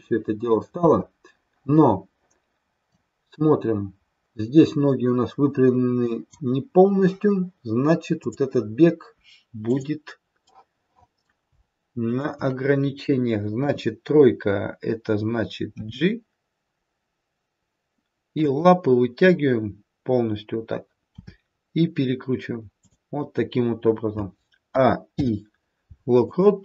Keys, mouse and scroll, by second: 0.7 space, 2.8 click, 8.2 click, 9.6 click, 10.5 middle click, 11.9 shift+click, 15.2 KP_3, 15.7 g, 21.1 r, 24.7 a, 25.2 i.